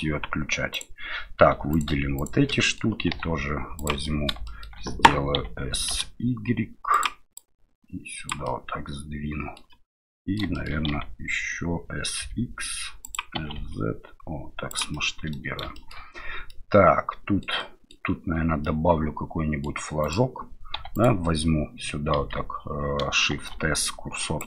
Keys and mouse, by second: 0.7 right click, 1.5 3, 1.7 right click, 2.1 shift+right click, 2.5 middle click, 3.1 e, 4.2 middle click, 4.5 shift+middle click, 5.4 s, 7.5 click, 8.6-9.6 middle drag, 10.2 middle click, 10.5 shift+middle click, 10.9 s, 13.3 s, 15.1 middle click, 15.8 middle click, 16.5-18.0 middle drag, 18.8 middle click, 20.0 right click, 20.7 1, 20.9 right click, 22.1 KP_7, 23.4 shift+s.